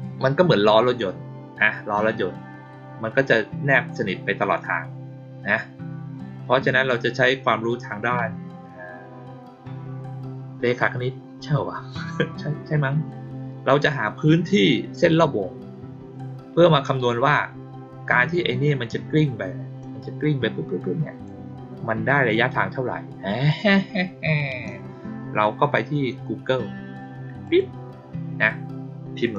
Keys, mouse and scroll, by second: 19.7-21.2 drag, 27.4 click, 29.3 click.